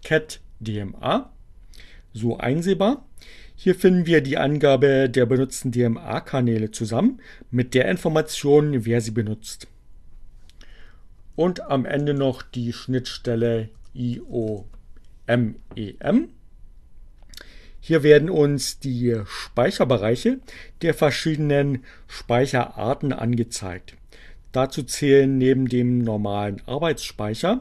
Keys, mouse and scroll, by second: 9.8 Up, 10.1 BackSpace, 12.5-15.0 typing, 19.9 Return.